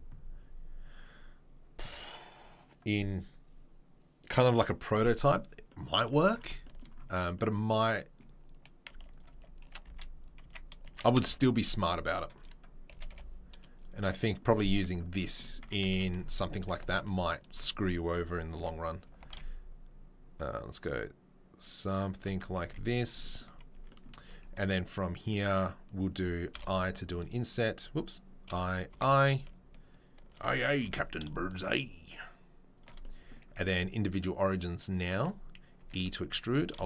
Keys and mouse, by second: 6.4-9.2 shift+right drag, 8.9 Tab, 9.2-15.1 middle drag, 9.3 Tab, 9.7 g, 10.4 Tab, 10.8 g, 12.9 g, 15.1-15.6 right drag, 15.6 Tab, 15.6-34.5 shift+middle drag, 16.2 3, 18.5 e, 19.1 alt+s, 22.6 z, 23.5 Tab, 23.7 Tab, 26.5 i, 28.5 i, 34.5-36.8 drag, 35.8 e, 36.5 alt+s.